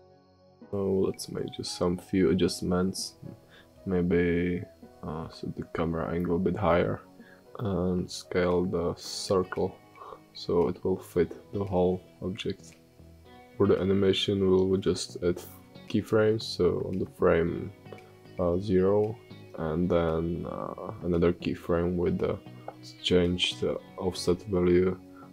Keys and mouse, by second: 0.6-2.6 drag, 4.3 g, 6.0 s, 9.5 ctrl+z, 9.9 click, 22.3 click, 23.7 space, 25.0 space.